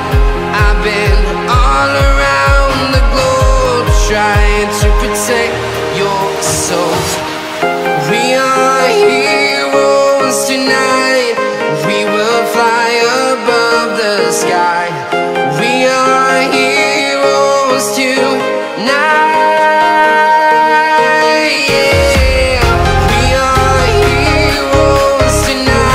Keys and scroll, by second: 1.6 ctrl+alt+shift+e, 16.0 F2.